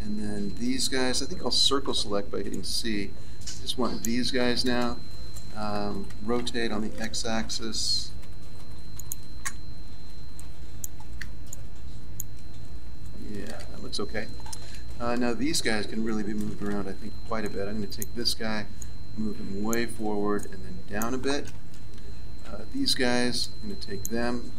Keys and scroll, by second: 1.8 c, 6.3 r, 16.4 a, 21.7 a, 22.4 b.